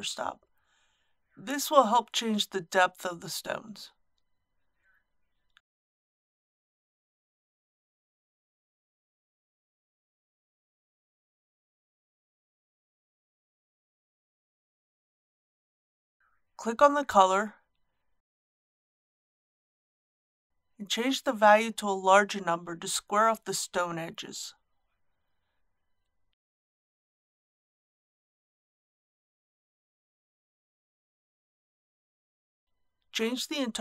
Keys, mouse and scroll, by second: 0.9 click, 14.3 KP_Decimal, 14.5 KP_2, 14.8 KP_5, 20.3 click, 28.7 KP_Decimal, 29.0 KP_8, 29.2 KP_5.